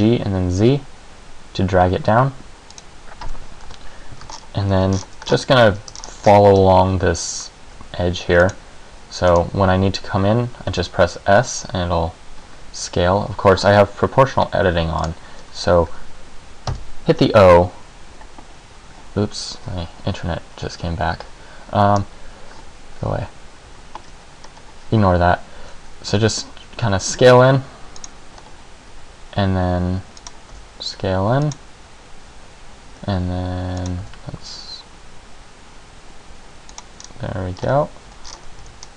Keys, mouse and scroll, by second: 2.9 click, 3.8 KP_Decimal, 4.5-4.9 ctrl+scroll up 6, 5.1 shift+scroll down 6, 5.4-5.8 scroll up 5, 6.1 shift+scroll down 2, 6.5 shift+scroll up 1, 7.8 e, 8.7 click, 9.5 scroll down 2, 10.9 s, 15.1 click, 16.0 Escape, 16.9 o, 22.1-22.7 scroll down 1, 24.6-26.3 scroll up 1, 26.3 s, 28.2 click, 28.5-28.9 scroll up 1, 28.9 e, 30.5 click, 30.7 s, 31.7 click, 33.1 e, 34.1 s, 36.9 click, 37.1-37.7 scroll down 2, 37.7-38.4 scroll up 2, 38.2 Tab, 38.4-38.9 scroll down 5, 38.8 z.